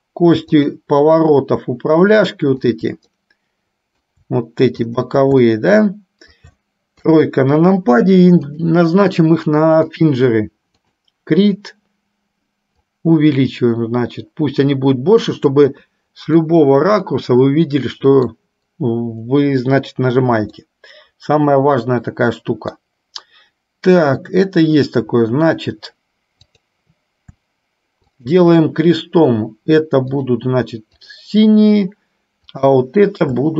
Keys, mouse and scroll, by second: 0.7 shift+click, 2.7 shift+click, 3.3-4.3 middle drag, 5.2 shift+click, 5.8 shift+middle click, 7.2 KP_3, 8.7-10.3 drag, 11.0 click, 12.9-15.8 drag, 16.7 scroll up 1, 16.8-18.4 middle drag, 18.4 scroll down 1, 20.7-22.9 middle drag, 28.2 shift+click, 31.3 click, 32.5 click.